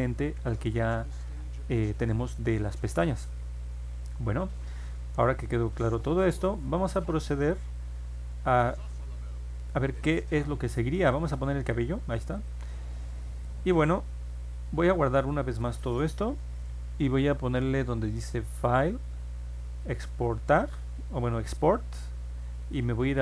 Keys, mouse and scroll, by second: 2.5 click, 4.2 middle click, 5.2-6.4 drag, 7.4 click, 8.7 scroll down 2, 9.1 scroll up 2, 11.1 click, 12.3 click, 15.4 scroll down 2, 15.8 scroll up 2, 18.4 click.